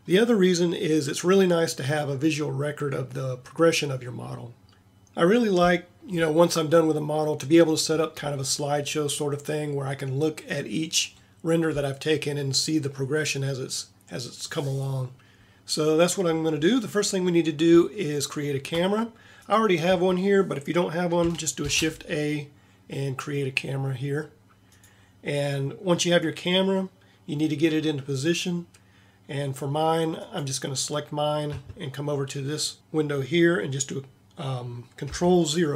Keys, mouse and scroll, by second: 19.9 a, 21.6 shift+a.